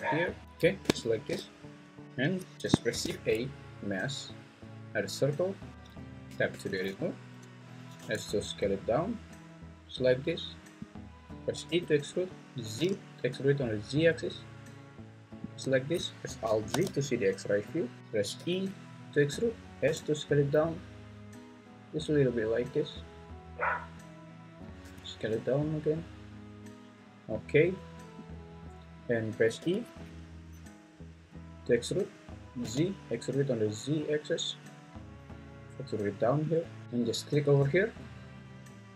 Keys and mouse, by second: 2.9 shift+a, 6.3 Tab, 8.0 s, 11.7 e, 12.8 z, 16.8 alt+z, 18.0 Escape, 18.3 e, 19.8 s, 22.9 click, 24.8 s, 26.9 click, 29.6 e, 32.6 z, 36.5 click, 37.1 alt+click.